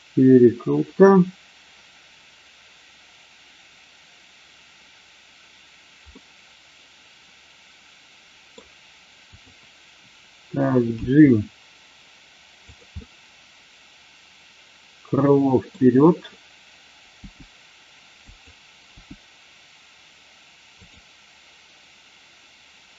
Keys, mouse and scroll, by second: 6.2-8.6 middle drag, 9.2-9.7 drag, 11.0 g, 12.6 click, 12.9-15.7 middle drag, 17.1 g, 18.2 click, 18.8 g, 20.8 click.